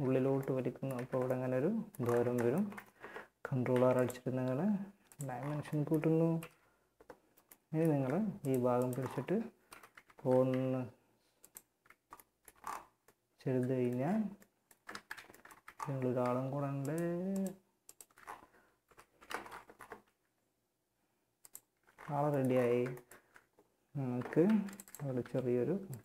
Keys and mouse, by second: 0.2 z, 3.0 ctrl+r, 5.6 KP_1, 8.2 middle click, 8.9 KP_1, 9.1 z, 9.7 r, 10.8 z, 14.1 ctrl+z, 14.7 z, 18.3 KP_1, 18.3 z, 19.2 r, 20.9 Tab, 22.5 Tab, 23.6 ctrl+r, 24.4 s, 25.3 click.